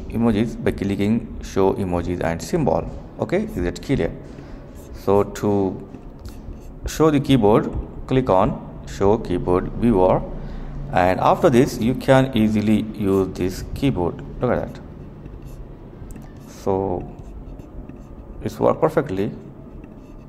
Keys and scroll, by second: 12.0-20.2 typing.